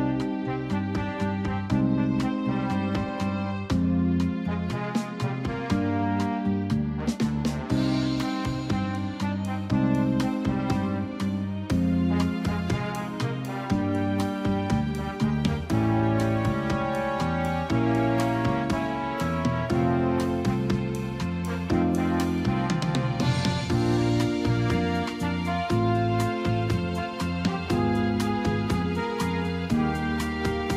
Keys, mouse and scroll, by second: 4.0 click, 6.9 click, 19.9 click.